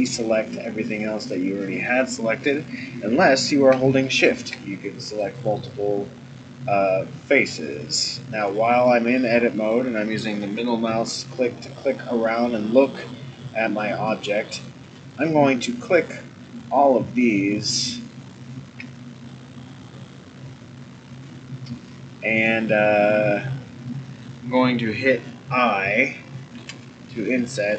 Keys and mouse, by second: 4.0 shift+click, 5.2 click, 8.4-10.2 middle drag, 11.7-14.5 middle drag, 15.8 shift+click, 16.5 shift+click, 17.4 shift+click, 18.1 shift+click, 19.2-24.2 middle drag.